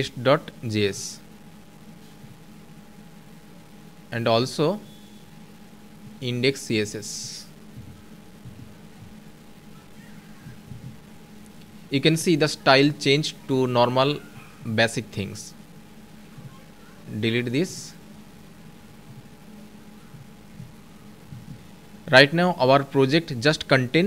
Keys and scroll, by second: 10.3 ctrl+s.